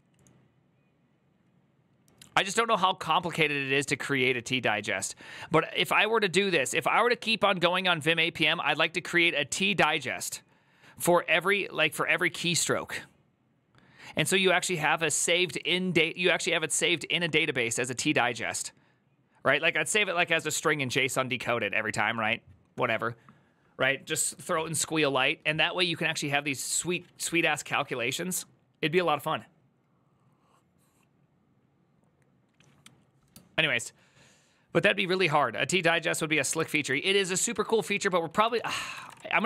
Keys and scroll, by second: 36.6 alt+{, 38.3 ctrl+c, 38.4 ctrl+c, 38.4-39.4 typing.